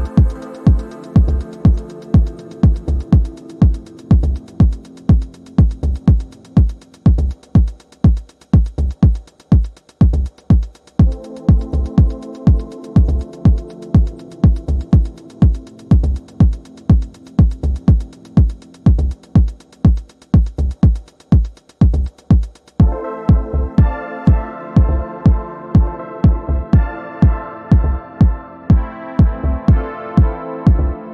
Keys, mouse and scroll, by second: 0.5 Return, 1.8-3.6 drag, 5.5-6.2 ctrl+scroll down 2, 6.2-6.8 ctrl+scroll down 1, 6.8-8.8 drag, 8.7 ctrl+scroll down 1, 9.2 click, 9.6 ctrl+scroll down 1, 10.4 click, 10.8 shift+click, 11.8 ctrl+d, 12.0-13.2 drag, 13.5 click, 13.8 h, 14.3 h, 14.9 click, 15.2 space, 15.5 click, 15.6-16.4 space, 16.6 ctrl+scroll up 1, 17.3-19.0 drag, 20.4 shift+click, 22.0-24.3 drag, 24.5 ctrl+z, 25.0 shift+click, 26.1 click, 27.0 shift+click, 27.9 click, 28.8 shift+click, 29.6 ctrl+g.